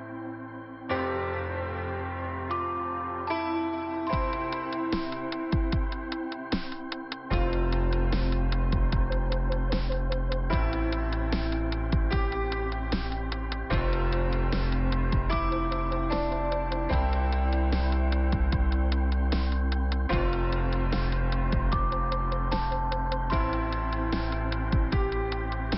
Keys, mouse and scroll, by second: 0.2 click, 2.0 click, 3.4 click, 3.8 click, 6.0 click, 6.5-7.4 scroll down 1, 7.4-8.2 scroll up 2, 8.2 click, 10.1 click, 11.4 scroll down 2, 11.9 middle click, 13.2 click, 14.4 click, 19.7 click, 20.4 click, 21.9 click, 23.8 click, 24.9 click.